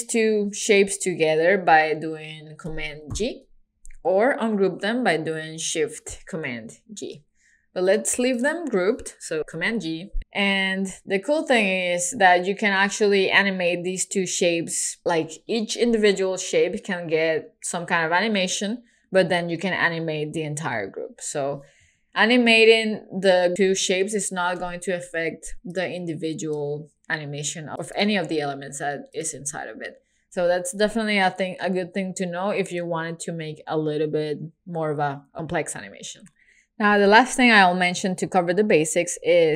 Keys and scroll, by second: 3.1 super+g, 6.7 shift+super+g, 9.4 super+g.